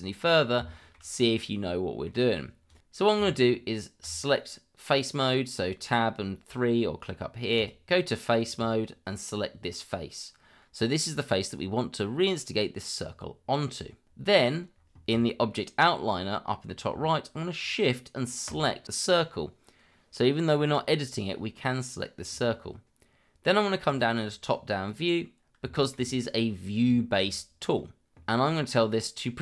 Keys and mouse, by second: 0.7 shift+middle drag, 1.1-2.1 middle drag, 2.7 click, 3.2 Tab, 7.5 click, 18.5 shift+click, 23.9 click, 25.7 shift+middle click, 27.0 shift+middle click.